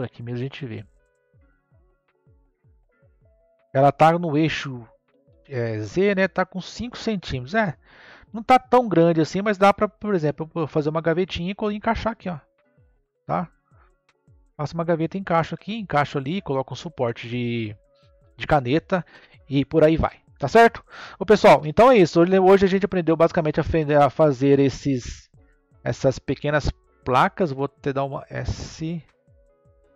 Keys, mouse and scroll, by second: 1.6 click, 9.7-10.3 scroll up 1, 10.3-12.5 middle drag, 12.5-13.1 scroll down 2, 13.1-16.2 middle drag, 21.5 n, 22.1-23.0 scroll down 4, 23.0-25.3 middle drag, 25.3 click, 25.9-26.9 scroll down 2, 26.9 click, 28.0 s.